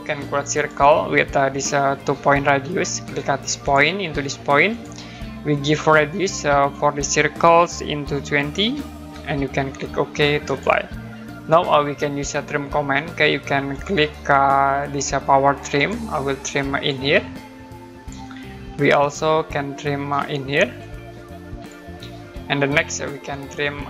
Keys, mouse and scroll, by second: 0.5 click, 3.6 click, 8.6-9.1 typing, 10.5 click, 13.7 click, 15.7 click, 19.0 middle click, 19.5 scroll up 1, 20.8 click, 21.9 scroll down 1, 22.8-23.2 scroll up 1.